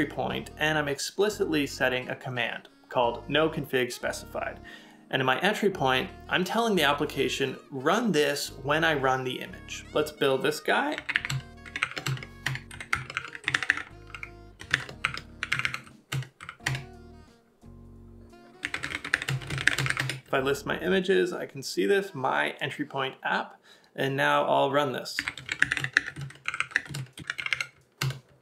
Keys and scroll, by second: 25.2 typing.